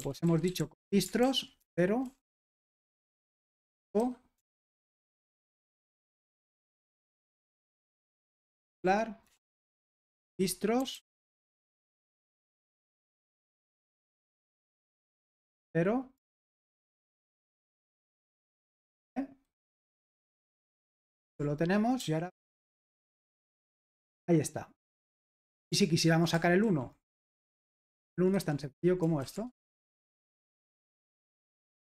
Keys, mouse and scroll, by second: 0.0-12.1 typing, 3.2 ctrl+w, 13.2 typing, 14.2-17.1 typing, 18.5 Escape, 18.9 shift+;, 20.3 w, 20.6 Return, 20.9 super+h, 22.7 ctrl+p, 23.3 Return, 26.6 super+l, 27.0-30.1 typing, 30.2 super+h, 30.6 ctrl+p, 31.3 Return.